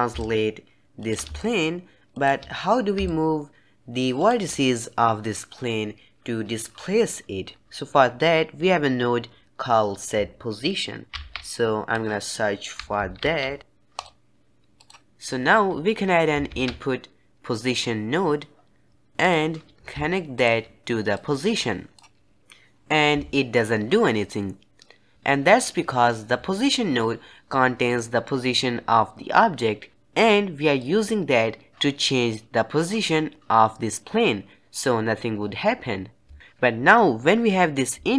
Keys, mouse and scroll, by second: 0.1 shift+click, 1.3 shift+click, 3.0-4.2 shift+drag, 7.6 ctrl+x, 11.0 shift+a, 16.4 shift+a, 21.0-22.4 drag, 27.9-29.9 middle drag, 30.7-33.7 drag.